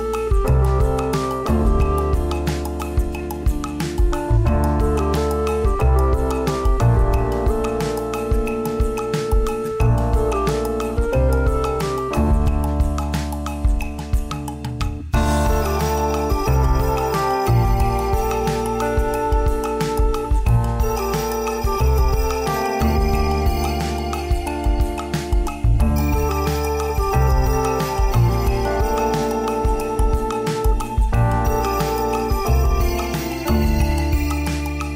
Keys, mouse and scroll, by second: 0.3 scroll down 2, 0.6 shift+middle click, 1.3 s, 5.8 g, 6.7 s, 7.4 g, 8.6 right click, 9.5-10.3 click, 9.7 click, 10.8 click, 13.0 right click, 13.3 right click, 13.8 s, 16.0 g, 18.3 s, 19.2 g, 19.8 s, 22.8 g, 25.0 click, 25.9 Tab, 26.7 z, 27.1 scroll up 1, 27.6 right click, 28.2 shift+middle click, 28.9 e, 29.5 g, 32.1 Tab, 32.7 right click, 33.2 z, 33.9 click.